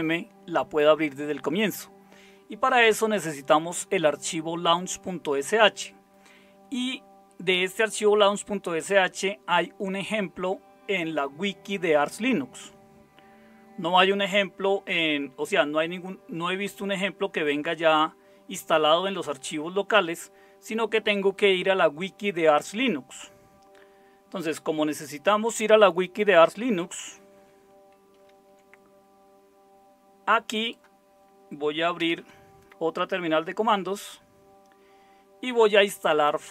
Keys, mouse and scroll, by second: 28.1 super+0, 32.0 super+Return.